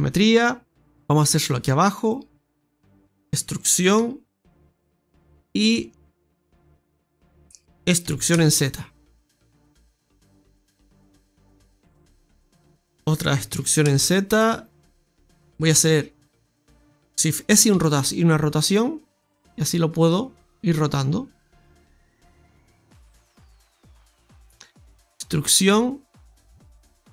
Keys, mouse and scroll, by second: 0.8 click, 1.4 right click, 2.0 right click, 2.4 shift+right click, 2.7 middle click, 6.9 right click, 8.3 e, 12.2 middle click, 12.8 KP_1, 13.5 e, 15.6 shift+s, 17.6 r, 20.0 click, 25.3 e.